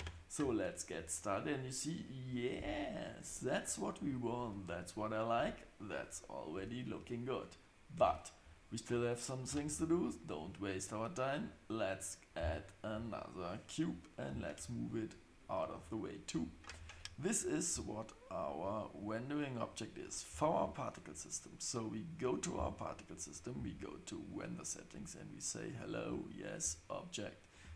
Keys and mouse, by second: 8.0 space, 9.5 shift+a, 14.3 g, 23.3-23.6 drag, 24.6-25.9 drag, 27.6-27.7 drag.